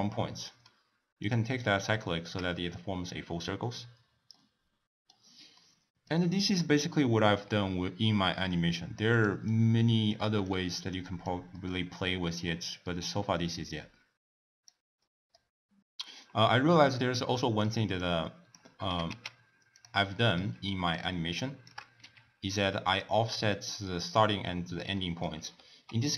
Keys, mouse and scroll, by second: 1.2 click, 2.0-7.0 shift+middle drag, 7.0-7.5 scroll up 1, 7.5-9.1 scroll down 1, 9.1 click, 9.4-10.5 drag, 11.5-13.5 middle drag, 13.5 click, 15.0 middle click, 17.3 middle click, 18.0 click, 18.8 g, 20.2 middle click, 20.9 shift+right click, 22.0 g, 24.9 scroll up 1, 25.0-26.1 middle drag.